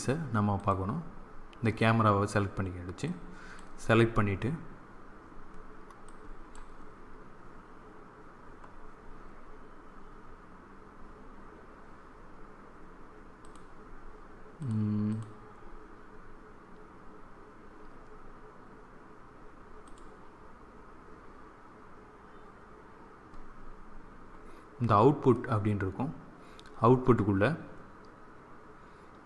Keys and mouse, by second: 7.8-29.2 drag.